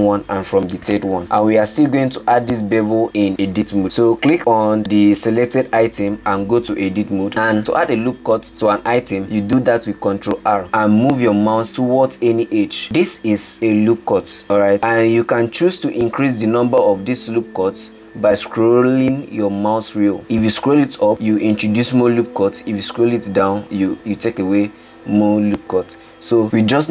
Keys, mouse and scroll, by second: 7.3 Tab, 11.5 ctrl+r.